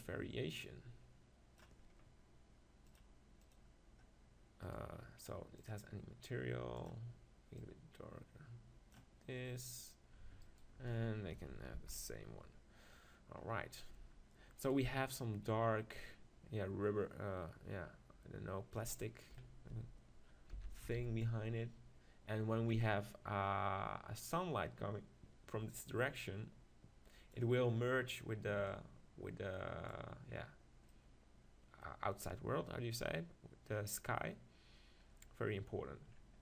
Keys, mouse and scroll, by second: 2.9-4.8 drag, 4.7-7.7 right drag, 5.7-9.5 drag, 10.4-11.8 right drag, 11.8 ctrl+j, 11.8 click, 13.4-14.7 middle drag, 14.7-16.4 right drag, 15.9-17.9 drag, 19.0 middle click, 20.5 s, 22.8-26.1 drag, 28.7-30.5 drag, 30.5 middle click.